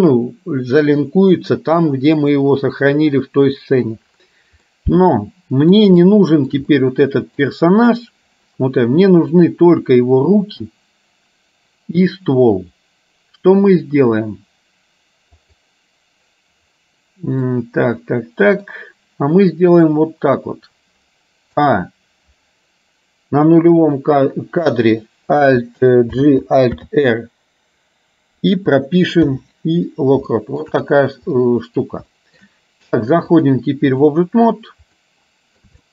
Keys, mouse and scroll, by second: 4.7-5.8 middle drag, 6.1 shift+middle click, 6.8 middle click, 9.2 middle click, 15.6 click, 17.6-18.7 middle drag, 21.7 a, 26.2 alt+g, 26.8 alt+r, 29.3 i, 30.3 shift+middle click, 31.6 middle click, 32.2 shift+middle click, 33.5 click, 35.2 middle click.